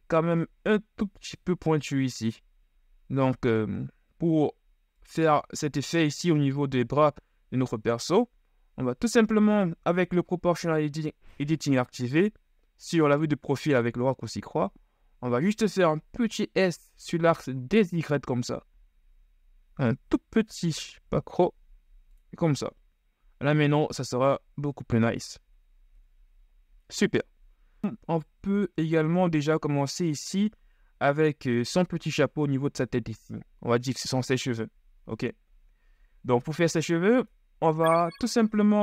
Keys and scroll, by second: 10.2 KP_3, 16.2 s, 26.2 KP_1.